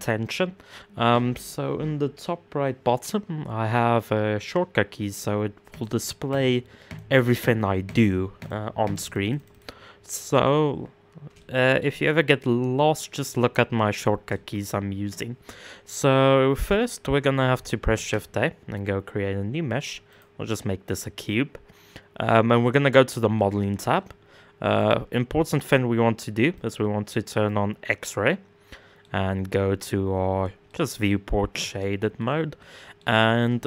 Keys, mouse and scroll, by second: 4.6 click, 5.3 click, 6.4 click, 7.4 click, 7.9 click, 8.4 click, 8.6 click, 8.8 click, 8.9 click, 9.1 click, 10.2 scroll down 1, 10.4-10.9 scroll up 2, 10.9-17.1 shift+middle drag, 17.5 shift+a, 20.2 scroll down 2, 22.2 click, 22.9-24.5 middle drag, 24.5-25.3 drag, 26.2-27.6 drag, 27.6-30.8 middle drag, 30.8-31.3 scroll up 3, 31.3 middle click, 31.8 scroll down 2, 32.2-33.6 middle drag.